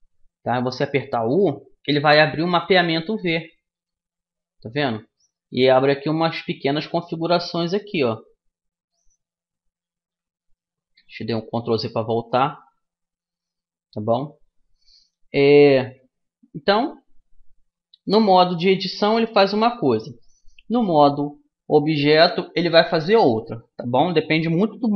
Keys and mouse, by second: 0.3 u, 7.6-10.1 middle drag, 9.4 ctrl+z.